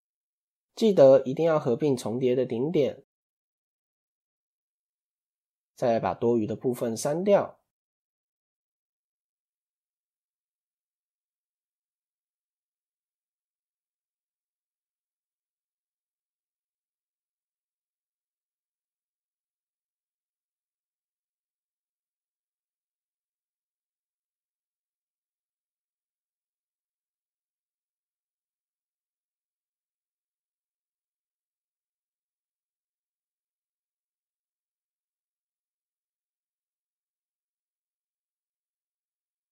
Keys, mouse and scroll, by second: 0.1 Tab, 0.7 a, 1.8 alt+m, 3.9 click, 4.7 scroll up 2, 6.1-9.1 shift+middle drag, 9.3 ctrl+End, 9.5-10.2 shift+middle drag, 10.2-10.7 scroll down 2, 10.7 click, 15.0 shift+middle click, 15.8 click, 17.6 x, 18.6-19.0 shift+middle drag, 19.0 scroll up 2, 19.5 shift+middle click, 19.7-20.1 scroll up 1, 20.1 shift+middle click, 21.0 click, 22.3 x, 25.0 c, 34.7 scroll up 2, 36.1 click, 36.7 shift+click, 37.8 shift+click, 38.3 shift+click, 39.0 shift+middle click.